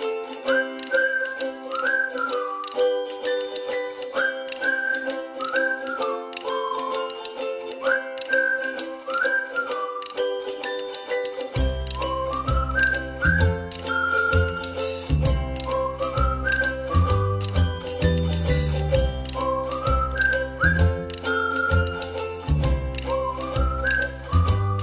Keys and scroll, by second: 19.6 a, 23.4 a, 24.3 ctrl+z.